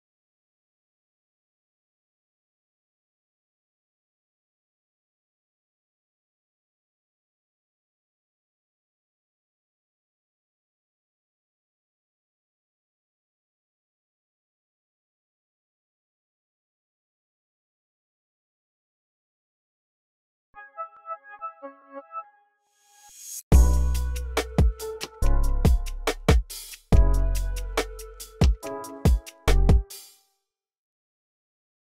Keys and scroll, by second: 1.1 alt+r, 1.9 alt+r, 6.4 super+f, 7.0 super+f, 10.7 alt+r, 13.1 alt+r, 29.6 space, 30.0 ctrl+b.